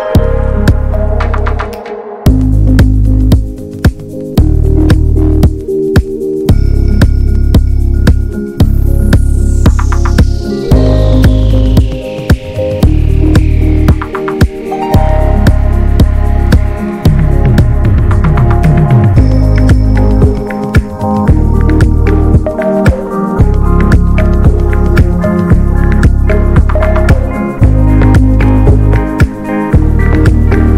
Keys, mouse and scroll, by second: 5.8 scroll up 2, 6.0-8.6 shift+middle drag, 8.6-9.7 drag, 9.7 ctrl+z, 13.6-14.6 drag, 14.6-17.7 middle drag, 17.7-20.2 drag, 20.2-26.6 middle drag, 26.6-30.7 drag.